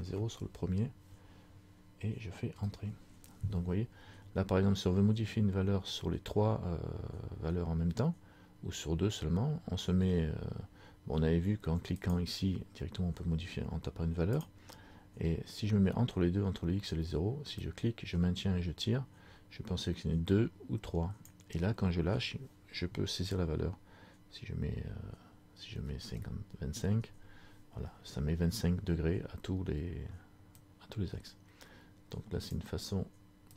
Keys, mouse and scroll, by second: 12.1 click, 17.7 click, 30.6 click.